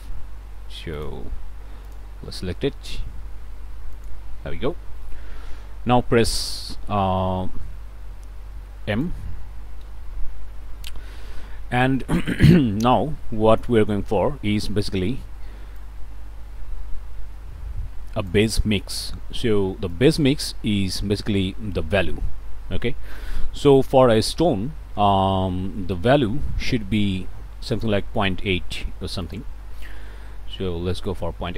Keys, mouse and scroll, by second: 1.0 click, 1.9 click, 4.0 click, 4.5 middle click, 4.8 click, 5.4 middle click, 5.7-7.8 drag, 7.8 middle click, 8.2-9.2 drag, 9.9 m, 10.9 middle click, 11.2 click, 11.3 middle click, 11.8 click, 15.7-18.5 drag, 19.9 click, 24.4 middle click, 25.1 click, 25.6 middle click, 26.7 click, 27.7 click, 29.2 click, 30.3 ., 30.5 KP_8, 31.0 KP_Enter.